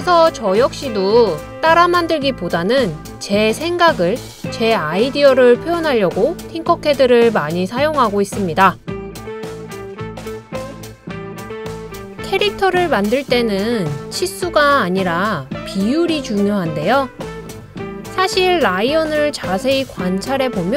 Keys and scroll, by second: 6.1 i, 10.8 i.